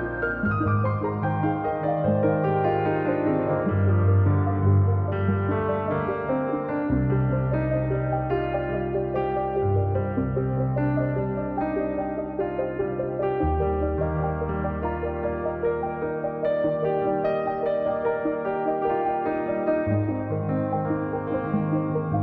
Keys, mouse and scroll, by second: 0.5 click, 1.2-2.0 scroll down 2, 2.0 click, 3.3 click, 4.5 click, 4.9-6.2 drag, 6.2-7.2 scroll up 4, 6.7 click, 8.9 click, 9.2-9.7 scroll down 3, 10.5-12.6 drag, 12.6-13.0 scroll down 1, 13.0 click, 13.9-15.1 scroll up 10, 15.1-16.6 drag, 18.0-19.2 drag, 19.8-20.8 scroll up 2, 20.8 scroll down 1, 21.1-22.2 middle drag.